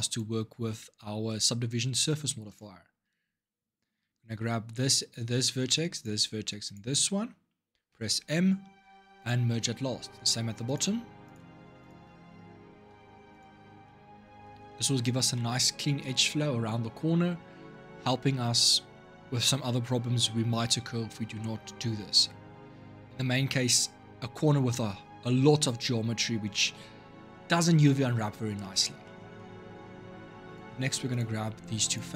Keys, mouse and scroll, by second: 2.2 shift+click, 4.4 click, 5.7 shift+click, 6.4 shift+click, 7.7 m, 9.5 middle click, 10.4 click, 11.0 shift+click, 11.6 shift+click, 12.7 m, 13.6 middle click, 14.0-14.4 scroll down 4, 14.4-18.9 middle drag, 28.4-30.2 middle drag, 30.2 click, 31.6 shift+click.